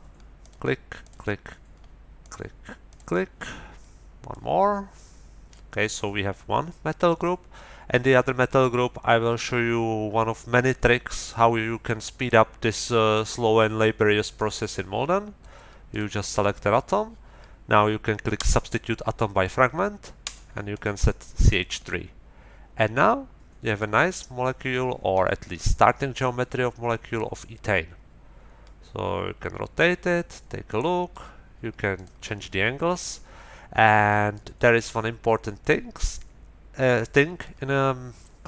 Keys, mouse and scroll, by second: 0.4 click, 1.0 click, 2.2 click, 2.9 click, 3.4-4.5 middle drag, 5.7-8.8 middle drag, 12.3 click, 14.3-15.6 drag, 15.9 click, 18.3 click, 20.2 middle click, 20.8-23.9 drag, 24.1 scroll down 2, 25.6-26.6 drag, 26.6 scroll up 2, 27.1-31.3 drag, 31.9 click, 33.1-34.5 middle drag, 34.9-37.6 middle drag.